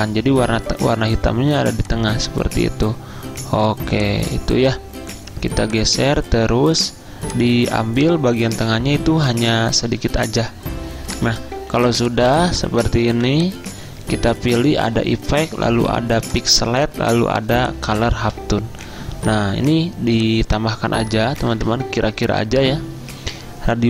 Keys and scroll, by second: 11.8 z, 13.2 v, 21.2-22.1 typing.